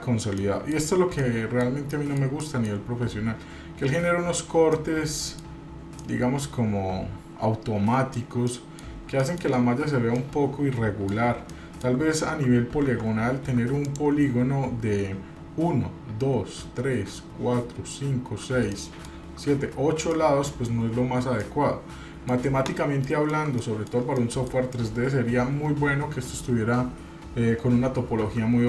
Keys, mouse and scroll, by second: 0.4 middle click, 1.0 scroll up 1, 1.2 middle click, 1.9 shift+middle click, 2.4 middle click, 4.7 middle click, 5.6-6.0 scroll up 1, 6.0-8.2 middle drag, 8.2 scroll down 2, 8.5 middle click, 9.1 shift+middle click, 10.2-11.2 middle drag, 11.4 shift+middle click, 12.1 scroll up 1, 12.9 Tab, 13.4 Tab, 13.8 click, 18.6 shift+middle click, 20.1 middle click, 21.4 middle click, 23.0 shift+middle click, 23.6 middle click, 24.2 shift+middle click, 28.2 1.